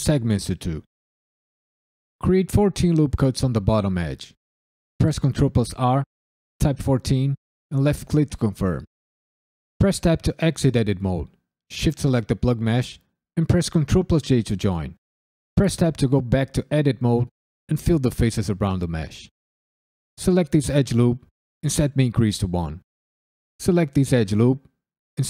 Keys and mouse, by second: 5.2 ctrl+r, 6.6 1, 6.8 4, 7.6 click, 9.7 Tab, 11.5 shift+click, 13.7 ctrl+j, 15.5 Tab, 16.3 shift+click, 16.5 shift+click, 17.0 f, 17.2 click, 17.4 shift+click, 17.6-19.2 f, 19.4 f, 20.1 alt+click, 21.9 click, 23.3 click, 23.9 ctrl+click, 24.5 ctrl+click, 25.1 ctrl+click.